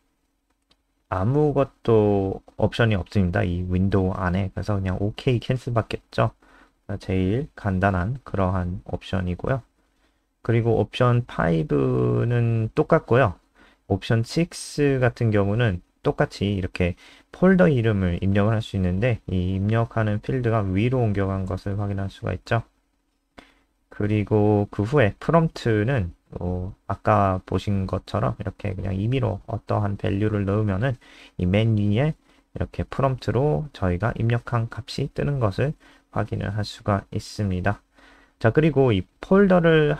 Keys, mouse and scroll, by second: 0.5 4, 1.0 ctrl+s, 1.7 F5, 3.7-8.1 scroll down 2, 8.1 click, 9.5 Return, 10.6 BackSpace, 11.7 BackSpace, 12.6 ctrl+s, 13.7 F5, 17.7 click, 24.4 typing, 26.6-29.8 typing, 29.8 ctrl+s, 30.1 F5, 37.2 click, 37.9-38.2 scroll down 2, 38.8 click, 39.6 ctrl+c.